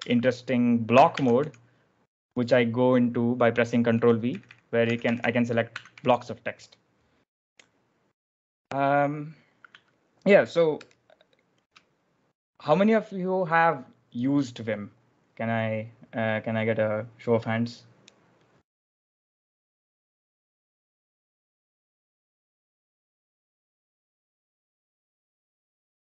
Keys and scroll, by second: 1.0 ctrl+v, 1.3 j, 3.8-5.9 typing, 5.7 Escape, 8.8 typing, 10.8 super+Tab, 11.8 super+Tab.